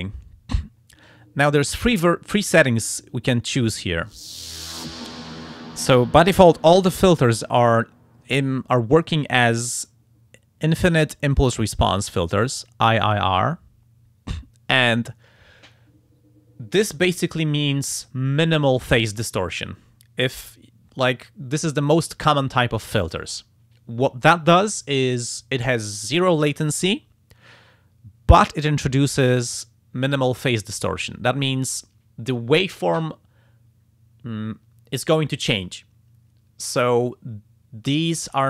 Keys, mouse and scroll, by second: 2.5 click.